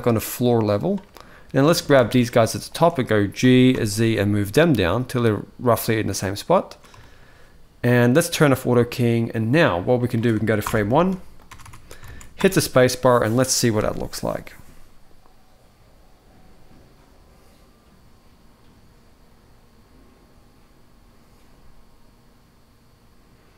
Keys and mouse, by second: 1.4 click, 2.4 shift+click, 3.1 g, 5.8-6.5 middle drag, 6.7-7.0 shift+middle drag, 8.2 click, 10.4 shift+Left, 11.2 Tab, 11.3 Tab, 11.9 alt+a, 12.1 space.